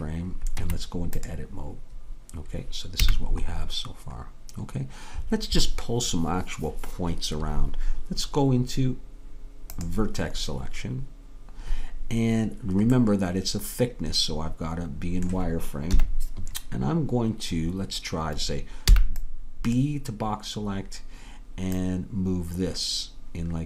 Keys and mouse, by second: 0.7 Tab, 3.1 a, 13.0-16.0 middle drag, 16.0 KP_3, 19.0 b, 21.9-23.6 drag.